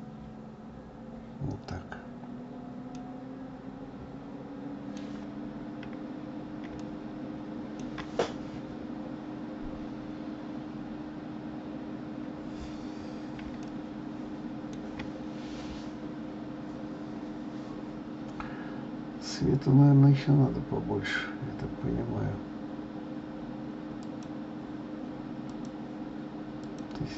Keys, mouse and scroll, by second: 3.0-5.5 middle drag, 5.5-5.9 scroll up 2, 6.4 scroll down 1, 6.9-9.9 shift+middle drag, 13.8-16.9 shift+middle drag, 24.1 click, 25.6 click, 26.7-27.1 drag.